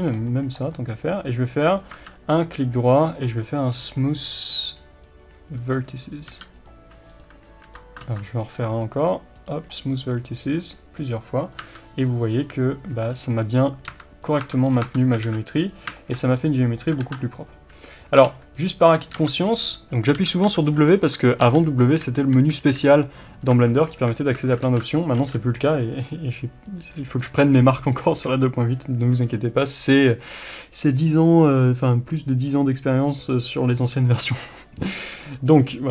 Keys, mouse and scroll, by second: 0.2 c, 1.9 1, 5.8 right click, 6.5-8.1 drag, 8.1 ctrl+z, 8.1-16.0 right drag, 13.9 2, 14.4 Tab, 14.8 scroll down 2, 14.9 Tab, 15.3 alt+a, 16.0-22.4 shift+middle drag, 17.1 ctrl+z, 18.1 3, 18.2 2, 22.4 KP_1, 23.5 1, 23.9 scroll up 1, 24.2 alt+a, 24.7 alt+z, 25.7 b.